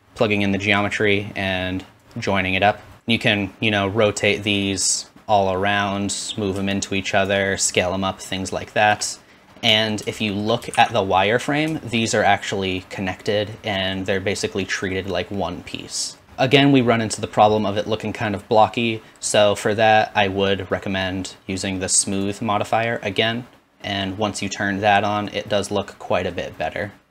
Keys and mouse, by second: 0.8-4.5 drag, 10.7 shift+z, 11.7 shift+middle drag, 13.3-22.2 middle drag, 22.9 click.